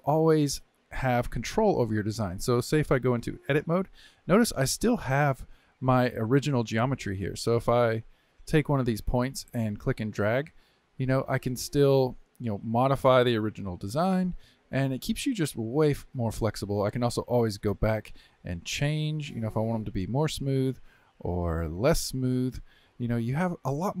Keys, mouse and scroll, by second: 3.5 Tab, 4.2-6.1 middle drag, 6.1 1, 6.5 click, 7.5 click, 8.4 click, 9.0-10.0 middle drag, 10.0 g, 13.9 click, 14.3 g, 17.0-21.2 drag, 21.6-24.0 drag.